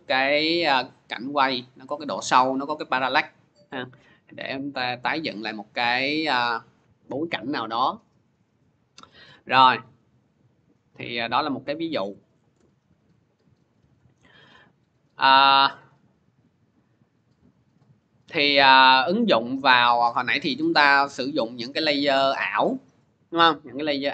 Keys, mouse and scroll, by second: 5.0 click, 9.5 click, 11.0 click, 11.8 Delete, 12.3 Return, 13.4 click, 14.7 click, 16.1 click, 17.3 click, 18.0 click, 18.8 click, 19.3 click, 19.5 click.